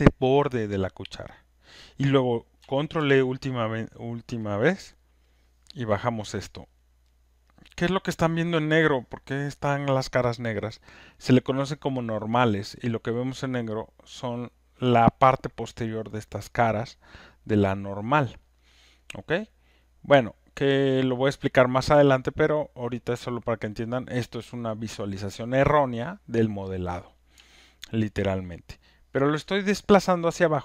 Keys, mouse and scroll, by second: 2.9 ctrl+e, 4.2 click, 6.0 click, 6.8 alt+scroll, 7.4 alt+right click, 7.7 alt+middle click, 7.8 alt+middle click, 8.8 alt+scroll, 9.4 alt+click, 9.6 alt+scroll up 2, 10.7 alt+scroll, 11.3 alt+click, 11.6 alt+middle click, 12.4 alt+right click, 13.0 alt+middle click, 14.0 alt+click, 17.6 alt+right click, 18.4 alt+click, 18.9 alt+middle click, 20.2 alt+click, 27.9 alt+middle click, 28.7 alt+right click, 29.2 alt+click.